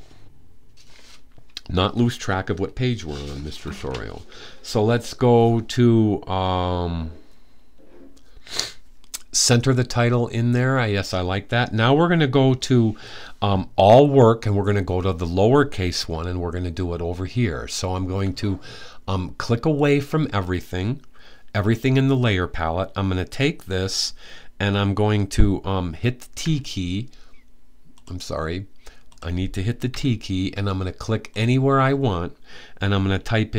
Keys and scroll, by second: 26.2 t, 29.6 t, 32.1 typing.